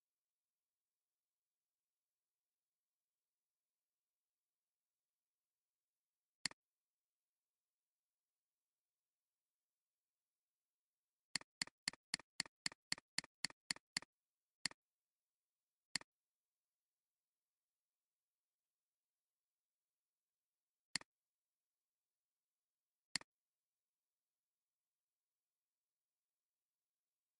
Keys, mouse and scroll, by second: 0.0-0.6 typing, 2.4-4.3 typing, 7.4-8.9 typing, 11.5 double click.